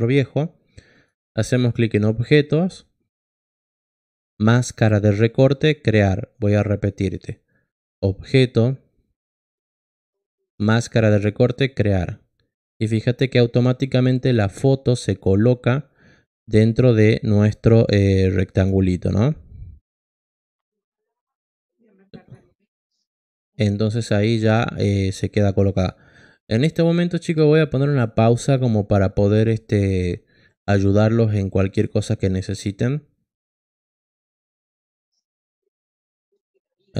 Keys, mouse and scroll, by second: 0.9 click, 16.7 click, 17.3 click, 18.5 click, 19.0 click.